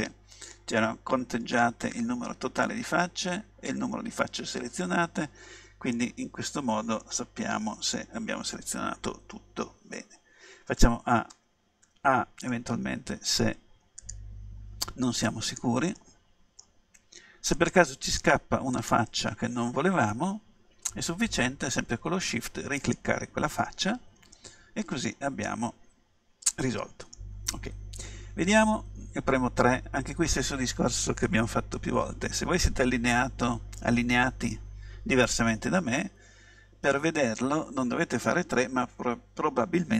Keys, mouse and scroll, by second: 6.0-8.5 middle drag, 10.8 a, 11.4 a, 11.9 a, 12.5-14.5 middle drag, 14.5-16.0 right drag, 16.0-17.4 middle drag, 17.6-21.6 right drag, 22.9-24.4 right drag, 24.4-26.4 middle drag, 28.4 KP_3.